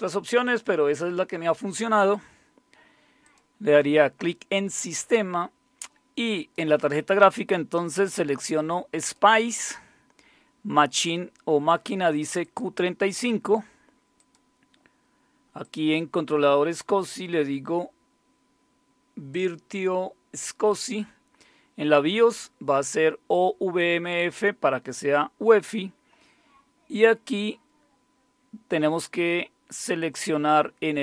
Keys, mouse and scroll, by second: 0.4 click, 3.2 click, 6.3 click, 9.0 click, 12.4 click, 14.2 click, 15.6 click, 19.3 click.